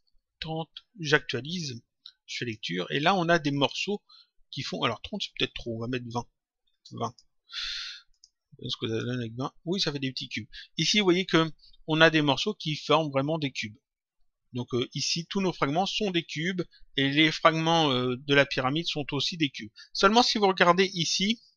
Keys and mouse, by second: 0.9 click, 2.3 click, 5.7 click, 7.0 click, 8.1 click, 9.9 click, 20.5 click.